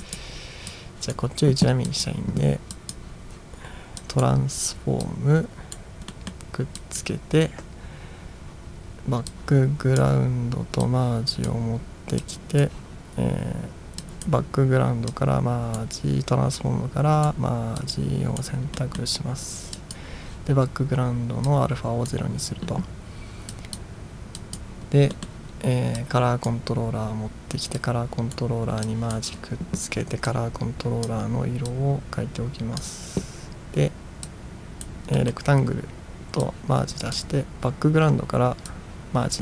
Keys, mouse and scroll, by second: 0.1 click, 0.8 click, 1.9 drag, 2.8 drag, 4.0 drag, 5.1-5.8 drag, 6.2 middle click, 6.8 click, 9.3-10.0 drag, 10.9 click, 12.3 click, 14.1 click, 15.1-15.8 drag, 16.6-17.3 drag, 17.8-18.5 drag, 18.8 middle drag, 19.8 click, 21.5-22.2 drag, 23.6 drag, 24.5 click, 25.2 middle click, 26.0 click, 27.9-28.4 drag, 28.9 click, 30.3-31.1 drag, 31.8-32.8 drag, 34.3-34.9 drag, 35.2 middle click, 36.5 click, 38.7-39.4 drag.